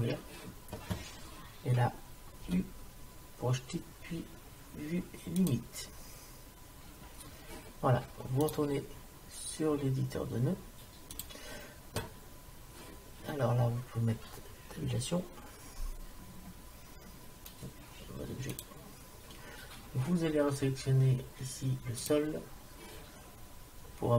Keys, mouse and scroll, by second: 2.5 u, 8.5-10.4 drag, 16.3 Tab, 22.0-23.9 drag.